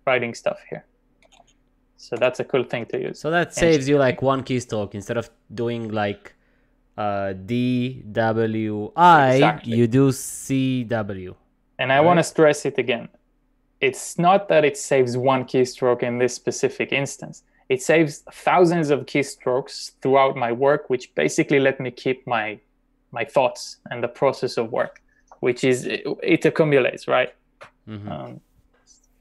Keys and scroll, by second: 1.3-2.2 typing.